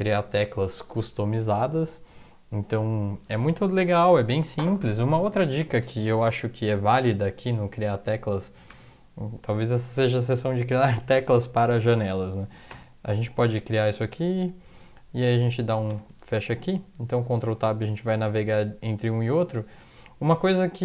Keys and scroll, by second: 8.7 ctrl+\, 12.7 =, 15.9 ctrl+\, 17.4 ctrl+Tab, 17.9 ctrl+Tab, 18.3 ctrl+Tab, 18.7 ctrl+Tab, 19.1 ctrl+Tab.